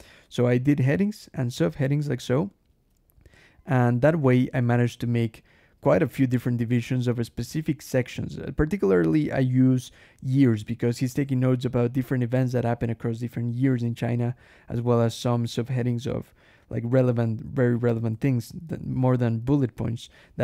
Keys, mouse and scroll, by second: 0.1 Escape, 0.2 k, 1.4 j, 2.3 j, 6.9 k, 8.2 j, 10.2 j, 11.7 k, 12.8 j, 14.2 k, 17.4 j, 18.0 k, 19.7 j.